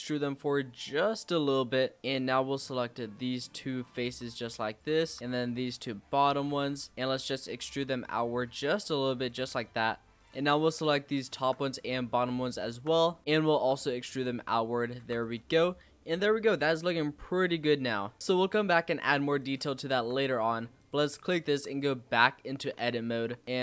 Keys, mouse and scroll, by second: 2.0 click, 2.5-3.8 middle drag, 3.8 shift+click, 4.6 shift+click, 5.2 middle click, 5.7 shift+click, 6.6 shift+click, 6.9 middle click, 7.6 alt+e, 10.1 click, 10.4 middle click, 11.2 shift+click, 11.5 middle click, 12.5 shift+click, 12.9 middle click, 13.5 alt+e, 15.0 Tab, 15.1 click, 15.4 scroll down 2, 15.6-18.1 middle drag, 18.1 scroll down 1, 18.8-19.4 scroll up 3, 19.4 click, 19.7-20.7 shift+middle drag, 20.7 click, 21.4 Tab, 22.7 Tab.